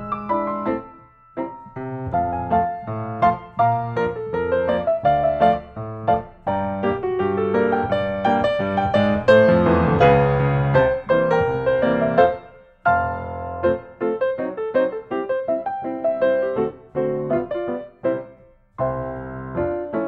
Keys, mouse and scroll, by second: 0.2 Return, 2.3 click, 3.8 click, 4.6 click, 7.0-8.0 typing, 8.4 Return, 12.1-13.2 drag, 13.6-14.7 drag, 17.1-18.2 drag.